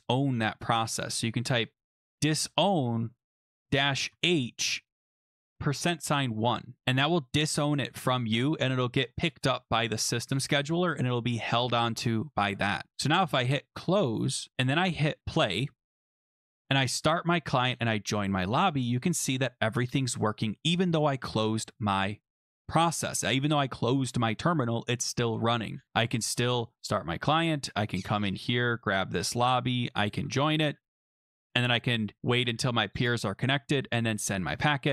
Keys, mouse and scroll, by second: 1.4-4.1 typing, 1.7-3.0 drag, 5.3-6.3 typing, 13.8 click, 15.3 click, 16.4 click, 16.9 click, 17.8 click, 19.4 click, 26.1 click, 26.8 click, 28.3 click, 29.1 ctrl+c, 29.5 click, 30.0 click, 30.1 ctrl+v, 30.9 click, 33.9 click.